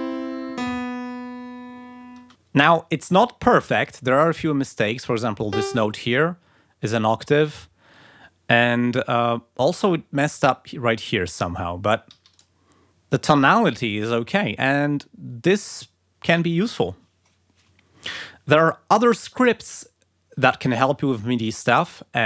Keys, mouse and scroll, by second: 2.1 space, 5.0 d, 5.5 click, 12.1 g, 12.3 click, 12.7 scroll down 2.